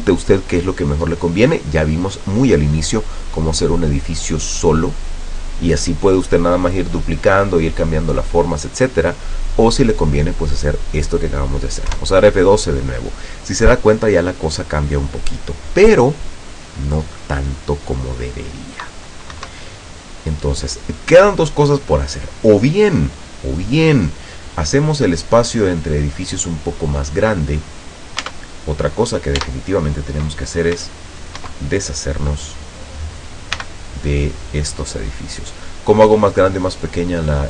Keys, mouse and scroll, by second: 12.1 F12, 19.4 Escape, 20.0-21.3 middle drag, 21.4-21.8 scroll down 1, 22.1-23.0 middle drag, 23.3-23.7 scroll down 1, 24.2 scroll up 1, 28.3 Tab, 29.1 right click, 29.5 Tab, 30.9 c, 31.5 Escape, 32.5 click, 33.7 c, 35.1 middle click, 35.9-36.7 scroll down 1, 37.0 scroll down 1.